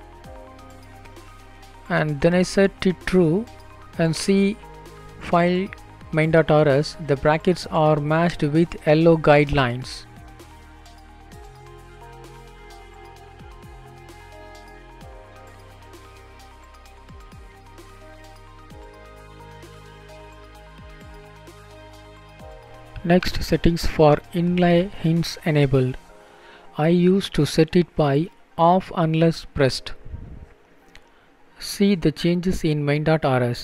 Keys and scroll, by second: 3.0 ctrl+s, 28.1 Down, 29.5 Return, 32.1 Down, 33.4 Down, 33.4 Down.